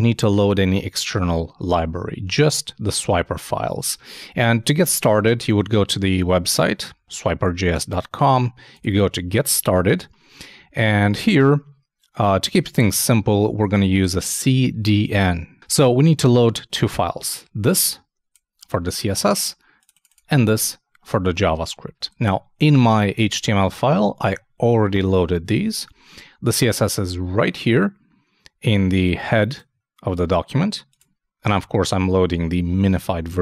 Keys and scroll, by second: 22.2 super+Tab.